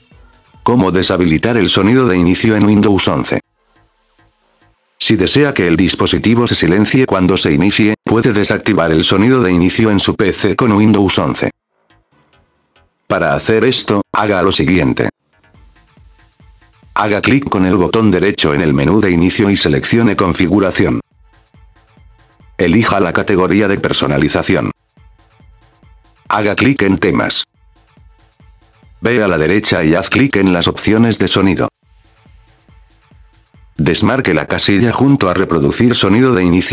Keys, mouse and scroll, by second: 0.6 click, 7.3 right click, 8.1 right click, 8.9 right click, 9.7 right click, 10.3 right click, 11.0 right click, 13.3 click, 14.1 right click, 15.8 right click, 17.1 click, 20.2 click, 23.6 click, 28.2 click, 31.4 click, 34.6 click, 35.3 click, 36.2 click.